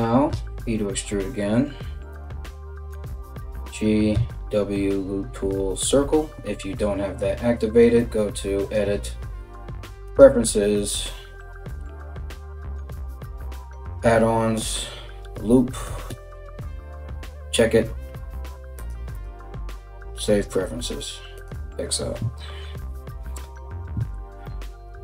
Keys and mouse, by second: 2.5 g, 3.8 w, 8.3-25.0 drag.